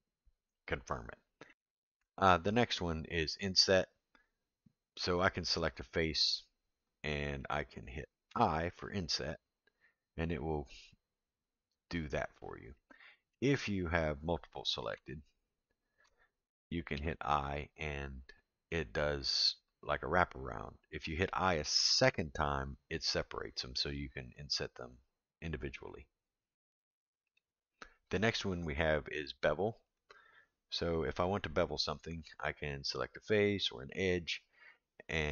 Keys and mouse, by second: 1.5 ctrl+z, 5.8 click, 8.3 i, 12.7 middle click, 15.5 shift+click, 16.9 i, 27.2 click, 30.0 click.